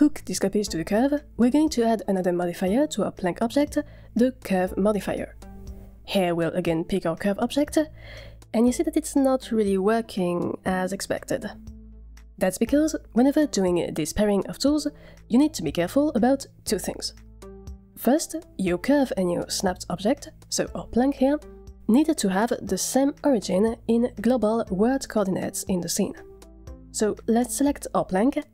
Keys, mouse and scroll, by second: 0.6 scroll up 1, 0.8 middle click, 0.9 shift+middle drag, 1.2 click, 2.2 click, 5.0 click, 6.8 click, 13.4-14.2 middle drag.